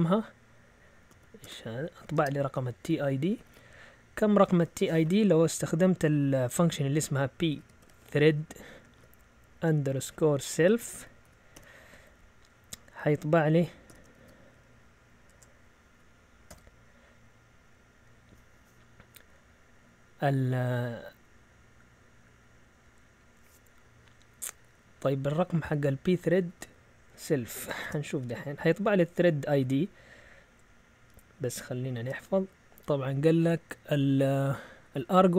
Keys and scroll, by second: 0.7-3.5 typing, 6.8-8.9 typing, 10.5-12.0 typing, 13.9 typing, 15.2-16.9 typing, 25.0 Left, 25.6 Left, 25.6-26.0 Left, 26.3 Right, 27.1 Right, 27.2 Right, 27.5 Escape, 27.8 shift+;, 31.6 x, 31.9 Return.